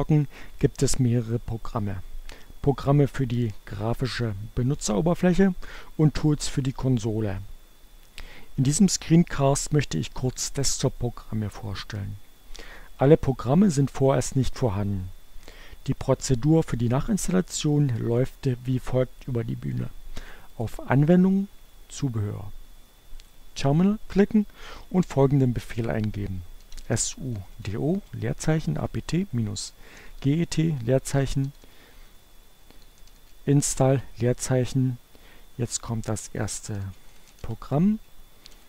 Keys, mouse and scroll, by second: 20.6 click, 23.1 click, 25.5-26.6 typing, 28.2-34.0 typing, 35.7-38.6 typing.